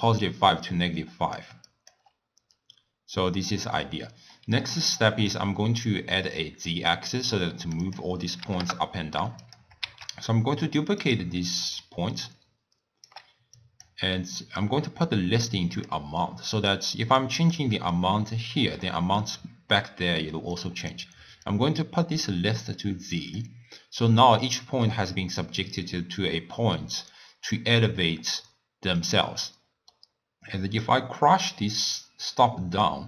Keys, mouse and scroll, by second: 0.0-2.1 typing, 0.7 click, 1.7 click, 2.4 scroll down 2, 2.6 scroll up 1, 2.7-3.3 scroll down 1, 3.3-3.9 scroll down 1, 3.9-4.9 middle drag, 4.9 click, 5.6 middle click, 6.0-6.9 scroll down 1, 6.9-9.6 drag, 10.1 shift+d, 11.6 d, 11.9-13.1 right drag, 13.1 d, 13.4 d, 13.6-14.7 drag, 16.5 click, 17.3 click, 17.8 middle click, 18.5-20.6 drag, 21.5-24.5 drag, 29.5-30.9 middle drag, 30.9-33.0 drag.